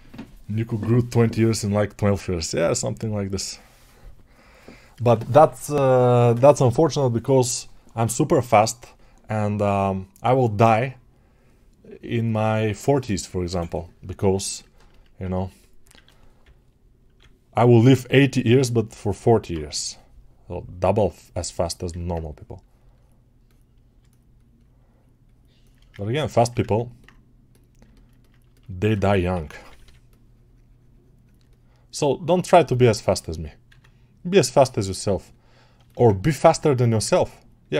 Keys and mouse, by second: 17.6 [, 23.9-27.7 shift+drag, 27.7-31.3 ctrl+alt+right drag, 31.3-32.6 alt+drag, 32.6-35.7 ctrl+alt+shift+right drag, 35.7 alt+shift+click, 35.8-37.7 ctrl+alt+right drag.